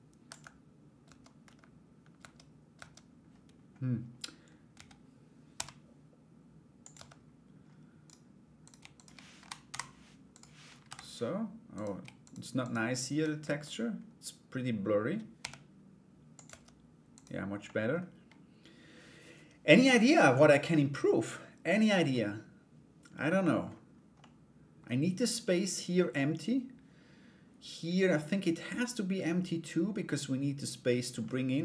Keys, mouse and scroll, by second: 0.6 Tab, 1.7 Tab, 4.3 a, 5.1 g, 6.5 Tab, 8.2 right click, 8.5 shift+right click, 8.9 End, 9.3 Delete, 9.9 right click, 11.3 right click, 11.8 shift+right click, 12.2 shift+right click, 13.0 Tab, 14.9 g, 16.7 right click, 17.2 middle click, 21.7-23.2 middle drag, 23.7 middle click, 27.7 middle click, 30.8 middle click.